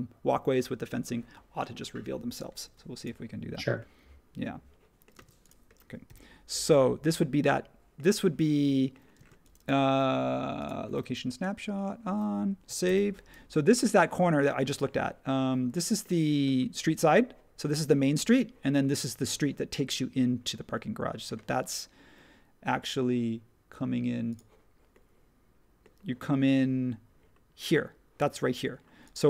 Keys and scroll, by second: 5.2 space, 6.0 |, 9.1 space, 12.8 super+s.